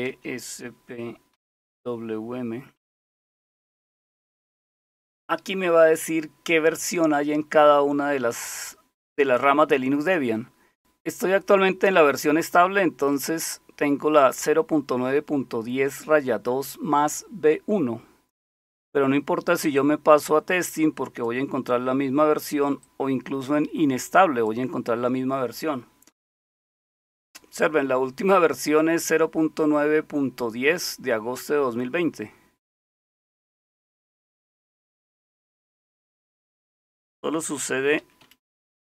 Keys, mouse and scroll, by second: 0.1 Left, 1.3 p, 2.9 Return, 11.1-13.1 drag, 19.7-21.3 drag, 22.8-24.5 drag, 32.7-33.3 scroll down 1, 33.6-34.2 scroll up 3, 34.6-38.9 typing.